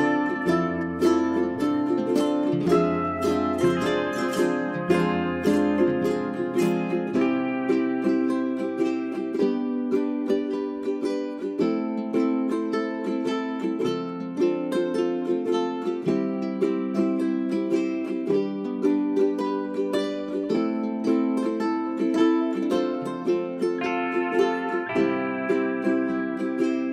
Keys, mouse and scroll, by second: 0.5 w, 1.4 click, 4.3 ctrl+a, 4.6 ctrl+a, 4.8-14.8 drag, 14.8 right click, 15.2 ctrl+Page_Down, 15.3 ctrl+Page_Down, 15.9 Page_Up, 16.8 space, 17.4 1, 17.9 click.